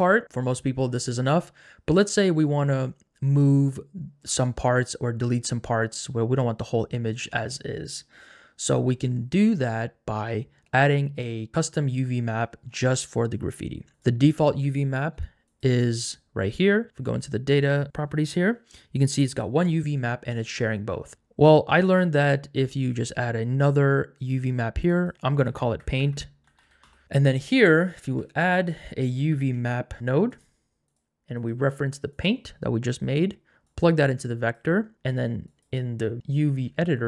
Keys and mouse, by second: 21.2 ctrl+z, 25.0-26.9 drag, 25.1 BackSpace, 27.7 click, 28.0 shift+a, 30.9 click, 31.3 click, 33.6 click, 35.5-36.9 drag.